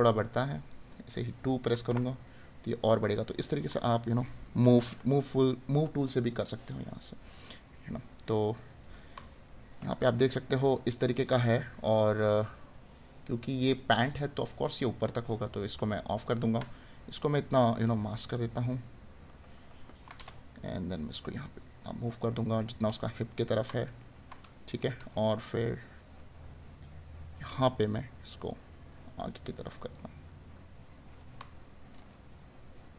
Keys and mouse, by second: 3.1 right click, 5.3 right click, 16.3 right click, 23.1 right click, 29.1 right click.